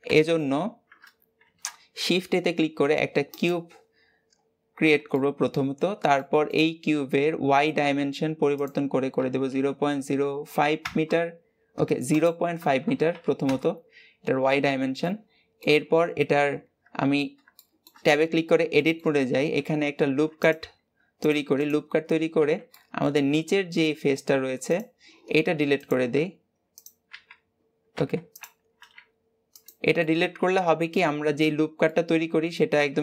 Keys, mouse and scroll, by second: 3.4 shift+a, 4.2-5.0 scroll up 3, 5.0-6.6 shift+middle drag, 6.6-9.7 scroll up 2, 9.7-10.6 scroll up 1, 10.6-14.9 drag, 14.9-16.7 middle drag, 16.7 Tab, 17.4 shift+middle click, 18.0-18.6 scroll up 2, 18.6-19.8 shift+middle drag, 19.8 ctrl+r, 22.6-24.6 middle drag, 24.6 click, 25.6 click, 27.0 x, 29.8-31.0 middle drag, 31.0 scroll up 2, 31.3 Tab, 31.7-33.0 middle drag.